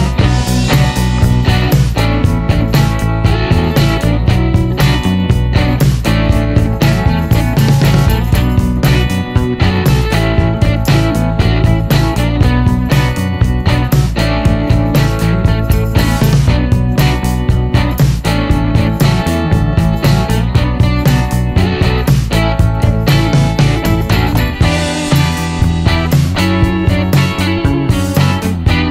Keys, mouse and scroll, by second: 0.3-0.7 shift+scroll down 1, 0.7 middle click, 0.8 scroll up 1, 1.3-2.3 middle drag, 2.5 scroll down 1, 2.5-3.5 scroll up 2, 4.8 click, 6.1 shift+click, 6.5 shift+o, 7.8 shift+o, 9.3 click, 10.7 click, 11.5 shift+o, 12.1-12.9 shift+scroll down 1, 13.0-14.3 middle drag, 14.7 middle click, 14.9-16.2 scroll up 3, 15.6 middle click, 16.5 scroll up 1, 16.7 middle click, 17.0 scroll up 1, 18.9 click, 19.5 click, 20.2-20.5 scroll up 2, 20.8 middle click, 21.2-21.6 scroll up 1, 22.9 click, 23.7 click, 24.7 click, 25.5 middle click, 26.2 middle click, 27.5 middle click, 28.0-28.3 scroll up 1.